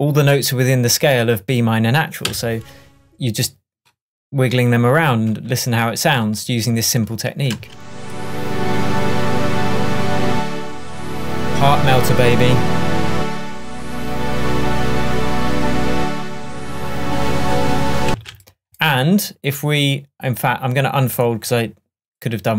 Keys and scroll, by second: 2.3 Down, 7.5 space, 18.1 space.